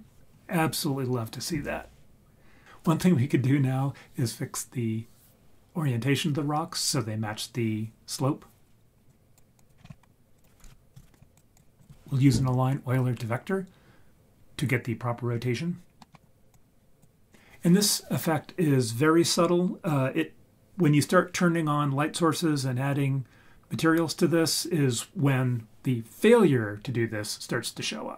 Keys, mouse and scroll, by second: 9.1 drag, 9.5 click, 9.8-10.2 scroll up 6, 10.3-11.4 drag, 15.8 scroll down 2, 16.0 middle click, 16.5-17.0 drag.